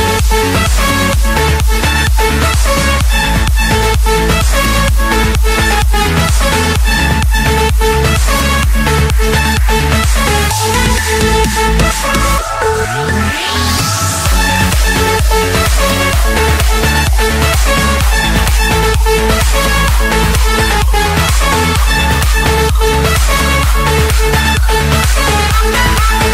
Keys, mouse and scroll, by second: 0.8 click, 1.2-1.6 scroll down 5, 1.6-2.3 scroll up 5, 2.9 click, 3.2 middle click, 3.3 middle click, 3.5 Escape, 3.5-3.9 scroll, 4.9-6.5 typing, 8.2 Return, 9.4 d, 9.8 Return, 11.5-12.6 typing, 13.4 Return, 14.2-15.8 typing, 16.8 Return, 19.8-20.9 drag, 21.5 click, 21.7 Return, 22.2 Return, 22.7 Return, 24.1-25.1 drag, 24.5 Return, 24.7 Return, 25.4 Return.